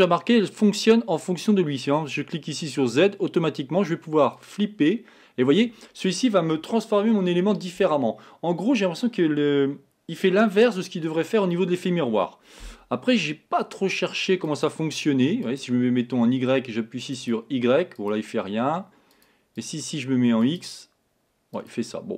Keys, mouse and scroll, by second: 2.6 click, 4.4 click, 14.5 click, 15.5 click, 17.2 click, 18.0 click, 19.1 click, 19.6 click, 20.4 click, 21.6 click.